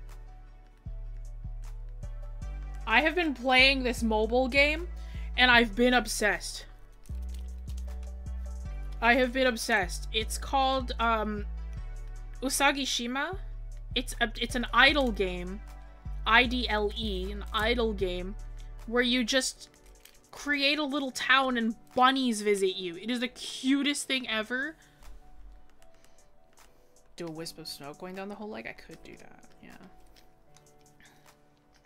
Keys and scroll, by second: 4.4 scroll up 1, 25.8-26.2 scroll down 1, 28.5 scroll up 1, 28.8 scroll.